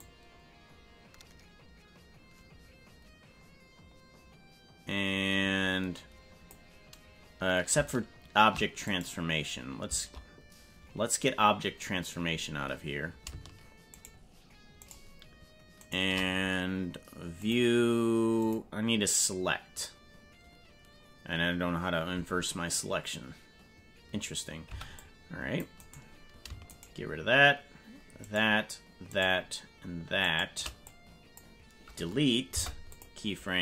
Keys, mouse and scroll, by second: 0.0-6.6 drag, 8.8 right click, 13.9 shift+right click, 14.8 shift+right click, 15.8 shift+right click, 17.3-18.4 drag, 24.6 c, 26.6 shift+right click, 28.2 shift+right click, 29.0 shift+right click, 30.2 shift+right click, 30.9 click, 32.5 Delete.